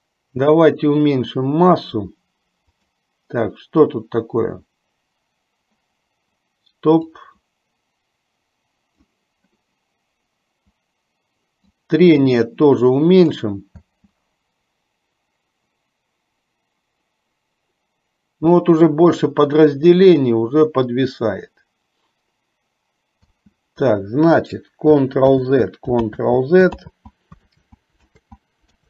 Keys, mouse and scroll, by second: 3.8 click, 7.1-9.5 drag, 12.0-13.6 drag, 14.1 space, 23.7 space, 25.5 ctrl+z, 26.5 ctrl+z, 27.2 ctrl+z, 27.7 ctrl+z, 28.5 ctrl+z.